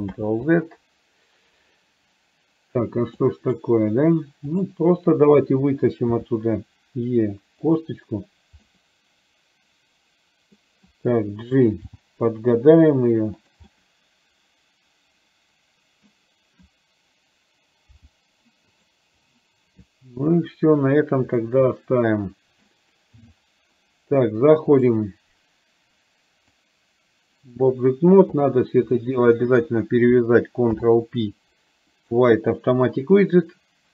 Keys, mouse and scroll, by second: 0.3 ctrl+z, 3.3 middle click, 4.6 click, 8.7-10.8 middle drag, 13.8-16.2 middle drag, 21.6-22.8 middle drag, 24.9-26.8 drag, 28.6 click, 29.7 shift+click.